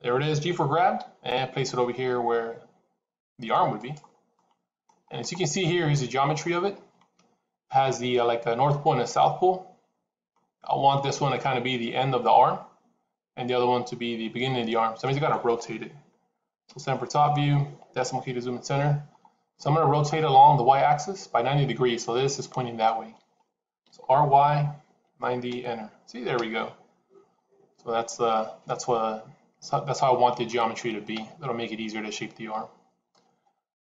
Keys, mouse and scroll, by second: 0.8 g, 4.2 middle click, 4.9-6.7 scroll up 3, 6.7-7.2 scroll up 2, 16.5 KP_7, 17.9 KP_Decimal, 19.1-19.6 scroll down 6, 20.4 scroll down 1, 23.7 r.